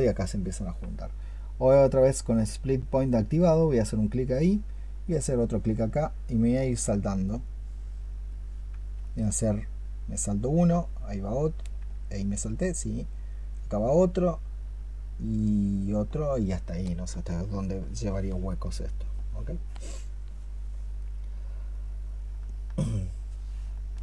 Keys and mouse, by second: 8.9 alt+click, 17.1 alt+click, 22.3 alt+click.